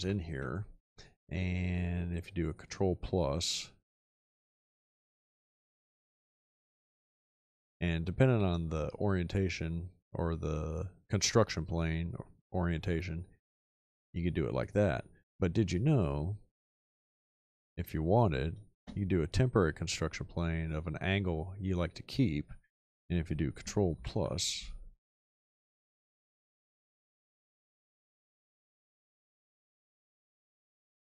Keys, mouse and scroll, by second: 0.0 ctrl+=, 18.8 space, 24.8 ctrl+=.